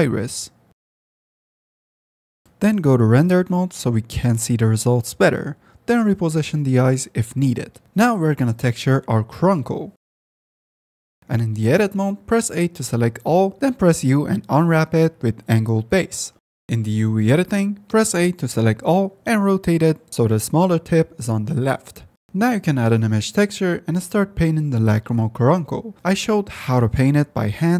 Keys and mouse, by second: 0.1 click, 0.9-2.1 drag, 2.4 F10, 3.0 middle drag, 3.6 click, 4.0 g, 5.0 ctrl+z, 5.1 Tab, 5.5 shift+click, 5.9 s, 6.2 g, 6.4 r, 7.4 Tab, 8.4 ctrl+s, 9.9-10.9 drag, 11.9 Tab, 12.7 shift+click, 13.6 a, 14.3 z, 14.6 u, 18.3 a, 19.9 r, 21.3 g, 22.2 KP_Decimal, 22.3 click, 23.3 shift+a.